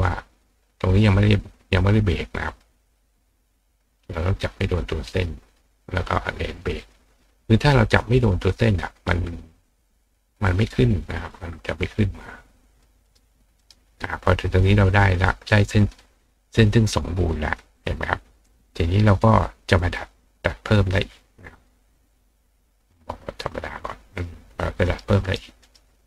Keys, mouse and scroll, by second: 2.5 click, 3.9 click, 4.5 click, 6.0 click, 6.8 click, 7.9 click, 8.5 click, 9.9 click, 10.5 click, 11.6 click, 12.7 click, 13.0 right click, 13.6 right click, 18.3 click, 21.5 click, 23.4 click, 24.1 click, 24.8 right click, 25.2 right click, 25.6 right click.